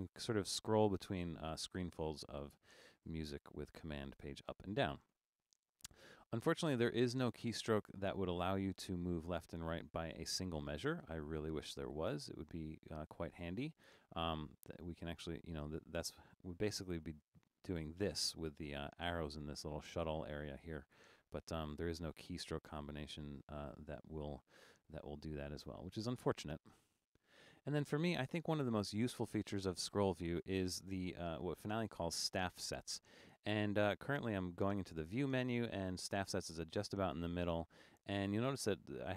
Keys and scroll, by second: 0.3 super+?, 2.8 super+?, 3.2 super+?, 4.2 super+?, 4.6 super+?.